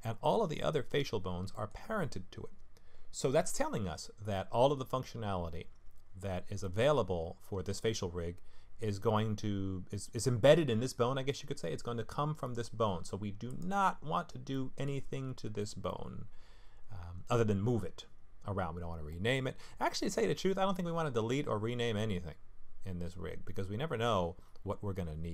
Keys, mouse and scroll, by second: 1.5 middle click, 6.6 middle click, 13.5 click, 14.5 middle click, 15.9 middle click, 19.1 middle click, 20.8 middle click, 22.0 middle click.